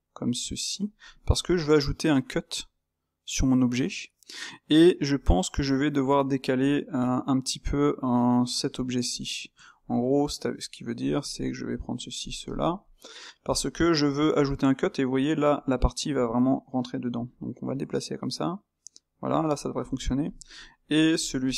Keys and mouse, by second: 1.3-7.6 middle drag, 7.6-9.1 drag, 9.5 Tab, 9.8-11.0 middle drag, 11.0 click, 11.7 middle click, 12.2 shift+click, 12.4 shift+click, 12.7-17.1 middle drag, 17.1 g, 19.6 middle click, 20.2 click, 21.2 shift+click.